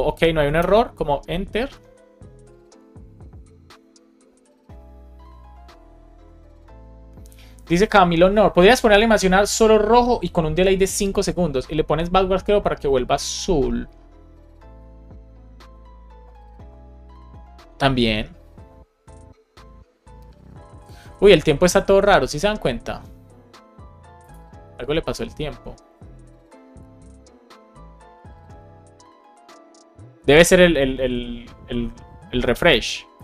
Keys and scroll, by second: 0.5 Return.